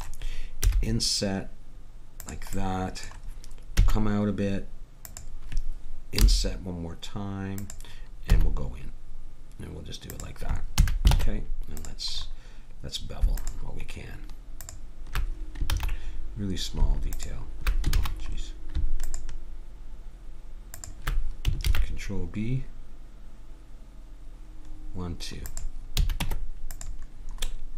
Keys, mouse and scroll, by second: 0.6 i, 3.8 e, 6.2 i, 8.3 e, 10.8 a, 11.2 ctrl+Tab, 13.4 click, 14.7-15.7 drag, 15.7 ctrl+z, 17.1 click, 18.0 ctrl+z, 19.1-22.7 drag, 21.6 ctrl+b, 26.0 a, 26.2 Tab.